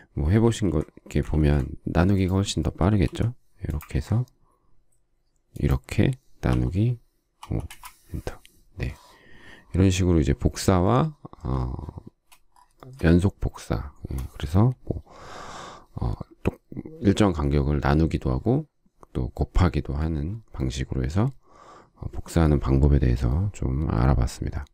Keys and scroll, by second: 0.3 ctrl+z, 1.1 ctrl+z, 2.9 m, 7.3 5, 7.5 Return, 11.9 space.